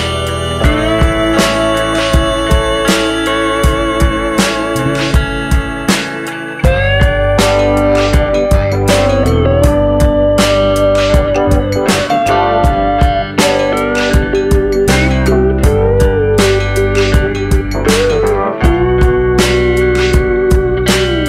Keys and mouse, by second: 0.8 ctrl+r, 4.8 click, 6.0 click, 7.5 Delete, 9.0 middle click, 9.7 middle drag, 10.1 shift+middle drag, 10.8 middle click, 11.2 shift+middle click, 12.1-12.5 shift+middle drag, 16.4-19.3 drag, 19.3 ctrl+r.